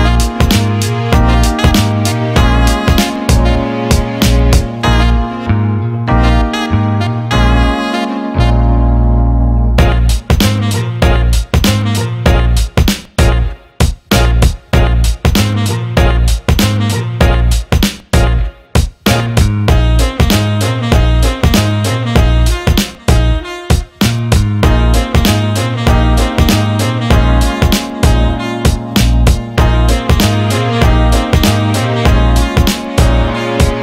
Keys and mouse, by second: 1.9 KP_3, 2.4 KP_1, 2.8 KP_7, 3.6 g, 5.8 r, 7.9 g, 10.1 shift+d, 12.3 g, 13.8-15.1 middle drag, 15.1 click, 15.8 g, 17.8 click, 18.9 g, 20.3 click, 20.9-22.4 middle drag, 22.4 click, 22.9 g, 24.9 click, 25.2-26.7 middle drag, 27.5-29.3 middle drag, 29.3 click, 29.6-30.6 middle drag, 30.6 click, 31.1 g, 32.8-33.8 middle drag.